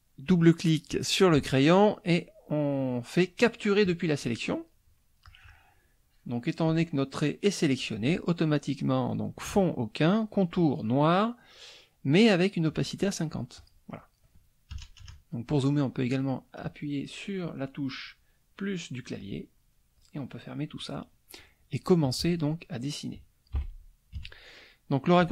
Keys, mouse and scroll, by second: 3.8 click, 5.2-6.8 drag, 13.6 click, 13.9 middle click, 14.7 KP_Add, 15.5 KP_Add, 15.6 middle click, 19.2 click, 20.0 click, 20.8 middle click, 22.0 click, 23.5 Delete, 24.2 KP_Subtract, 24.7 middle click, 25.0 click.